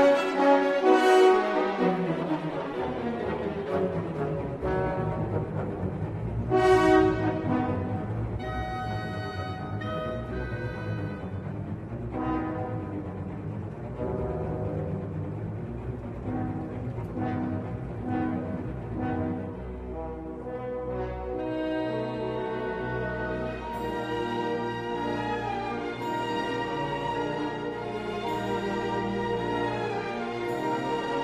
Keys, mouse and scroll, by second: 0.4 click, 0.6 click, 7.1-8.4 shift+middle drag, 9.7 w, 12.5 3, 13.4 a, 15.3-16.9 middle drag, 17.8 e, 19.2 click, 25.1-28.1 drag, 28.9-30.8 middle drag.